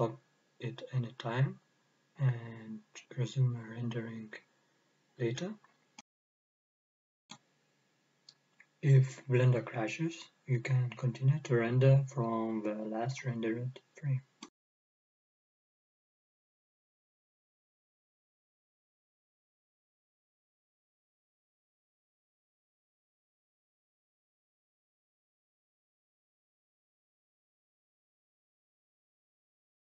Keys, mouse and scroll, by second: 13.8-14.5 scroll up 1, 22.8 KP_0.